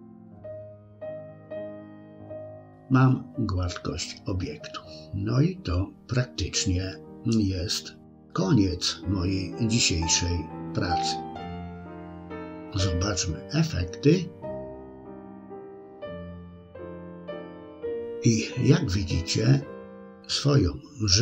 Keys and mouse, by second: 1.1 middle click, 3.6-8.8 middle drag, 9.5 KP_1, 16.0 shift+c.